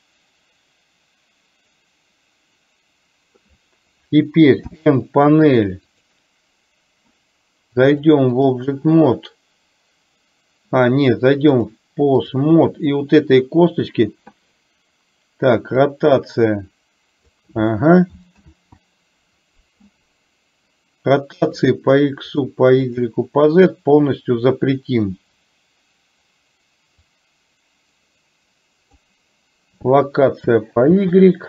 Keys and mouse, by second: 4.8 n, 8.0 click, 11.7 click, 15.9-17.4 drag, 18.7 ctrl+z, 21.7 click, 22.5 click, 23.2 drag, 27.3-29.0 drag, 30.9 ctrl+z.